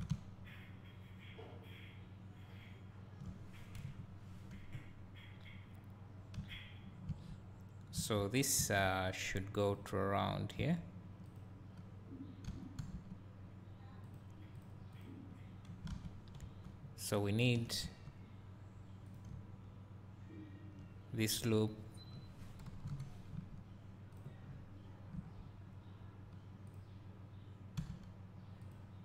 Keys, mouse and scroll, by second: 3.8 KP_1, 5.3-6.5 scroll down 2, 9.7 click, 11.2 z, 11.3 click, 12.9 g, 14.1 click, 15.5-15.9 scroll down 2, 15.9 alt+a, 16.5 2, 17.9 1, 19.1 click, 19.3 `, 22.8 KP_1, 24.1 z, 24.4 click, 24.4 scroll up 2, 26.7 click, 27.9 g, 28.7 click.